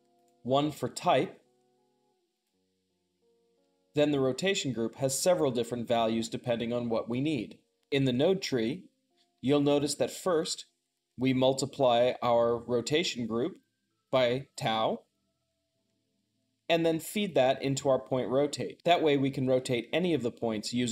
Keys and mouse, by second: 0.0 click, 1.4 Tab, 2.3-20.9 drag.